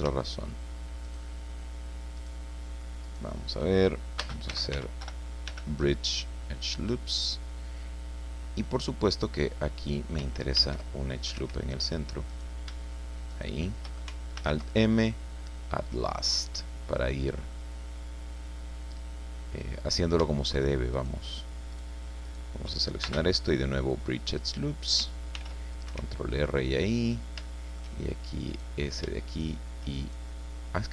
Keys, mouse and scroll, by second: 1.0 shift+right click, 2.1 shift+right click, 3.0 shift+right click, 4.2-5.9 typing, 6.6 click, 8.2-8.7 scroll up 1, 8.7 scroll down 2, 10.5 ctrl+r, 11.2 ctrl+click, 11.3 ctrl+Escape, 12.3 right click, 13.3 shift+right click, 14.3 alt+m, 15.8 click, 16.6 scroll down 2, 16.9 middle click, 17.7-18.1 scroll up 2, 18.3 scroll down 2, 19.9 shift+right click, 20.9 shift+right click, 21.7 shift+right click, 22.2 shift+right click, 23.0 shift+space, 23.9 click, 25.3 ctrl+r, 25.7 ctrl+click, 25.9 ctrl+Escape, 26.4-26.7 ctrl+scroll up 3, 27.5 shift+middle click, 28.5 right click, 29.3 shift+right click, 30.0 shift+right click.